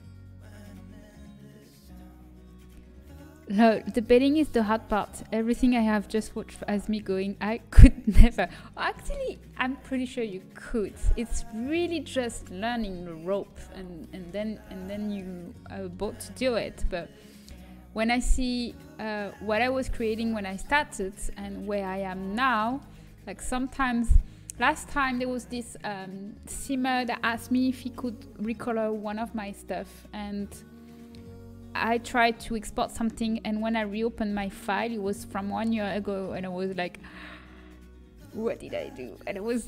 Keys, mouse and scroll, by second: 0.6 s, 14.0-18.0 middle drag, 18.0 ctrl+b, 21.8 middle click, 22.3 a, 22.9 Tab.